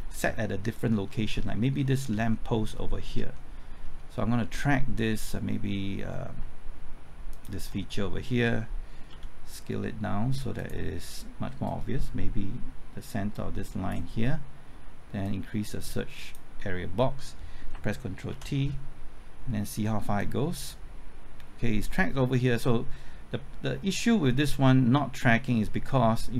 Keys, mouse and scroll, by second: 0.4 shift+middle click, 1.1 scroll up 1, 1.5 shift+middle click, 1.8-2.3 scroll up 2, 2.7-3.1 scroll up 1, 3.3 shift+middle click, 3.8-5.0 scroll up 1, 7.3 ctrl+click, 9.1 s, 10.5-16.6 drag, 17.7 typing, 18.3 ctrl+t, 20.2-26.3 drag.